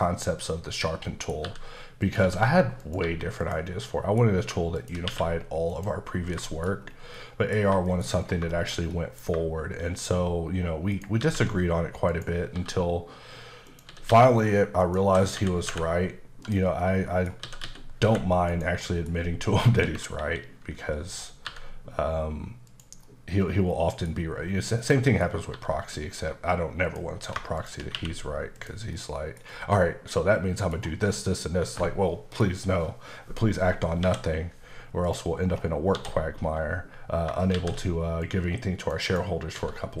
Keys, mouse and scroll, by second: 0.2 middle click, 0.5-0.8 scroll down 2, 0.8 middle click, 1.4 g, 2.0 click, 2.2 s, 2.8 click, 3.4 click, 3.8 middle click, 4.2 scroll down 1, 4.8 shift+click, 5.1 q, 5.9 click, 6.1-6.4 scroll down 2, 6.4 shift+middle click, 6.8-7.1 scroll down 2, 7.1 middle click, 7.8 shift+middle click, 7.9-8.4 shift+scroll down 3, 8.5 shift+middle click, 10.9 shift+right click, 11.2 shift+a, 12.1 click, 12.5 typing, 13.7 click, 13.9-15.7 typing, 16.4 click, 16.8 middle click, 17.4-18.0 typing, 18.5 click, 18.8 middle click, 20.2 KP_7, 21.4 g, 22.7 click, 23.0 middle click, 24.2-24.8 scroll up 2, 24.8 middle click, 25.2 scroll up 1, 25.5 g, 26.9 click, 27.6 shift+click, 27.9 q, 28.6 click, 28.8 scroll up 1, 28.9 middle click, 29.4 scroll down 3, 29.7 middle click, 30.8 scroll down 1, 31.1 middle click, 34.0 KP_7, 35.0 click, 35.4 scroll up 1, 35.9 d, 37.5 shift+a, 38.2 click, 39.0 double click, 39.5-40.0 typing.